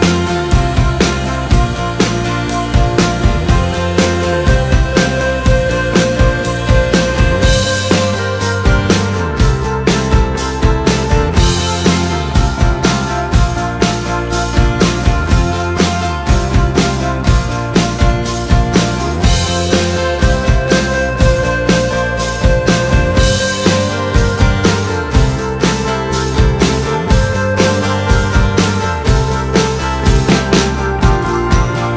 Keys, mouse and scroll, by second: 3.9-16.1 drag, 23.1-31.9 drag.